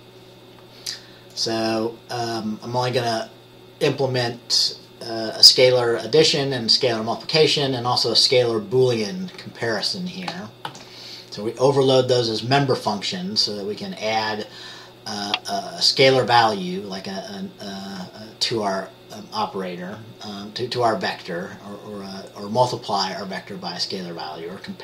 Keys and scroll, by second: 10.8 ctrl+s.